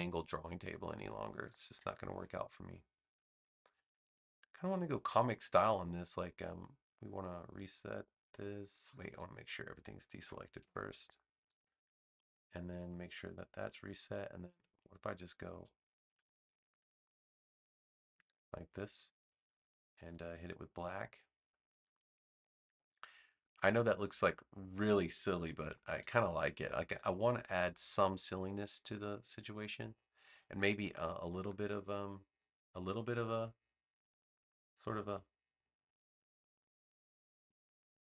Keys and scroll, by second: 10.1 Escape, 25.5 v.